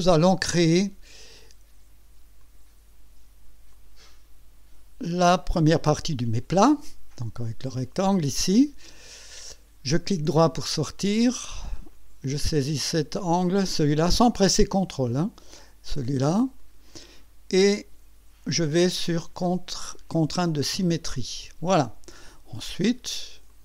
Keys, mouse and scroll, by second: 2.4 click, 3.7 click, 5.4 click, 10.3 right click, 11.9 click, 14.3 click, 16.6 click, 16.7 click, 20.6 click, 23.5 click.